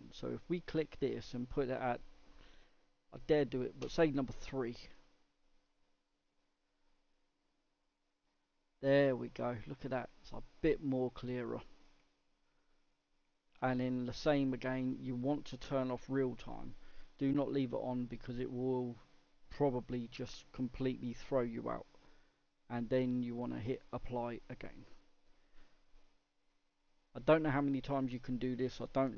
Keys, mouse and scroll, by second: 7.5 scroll up 3, 8.3-8.9 scroll up 1, 8.9-10.3 middle drag, 10.3-10.6 scroll down 1, 10.6 middle click, 11.1 scroll down 2, 11.5-12.1 middle drag, 12.1-12.6 scroll down 2, 12.6-15.8 middle drag, 15.8 click.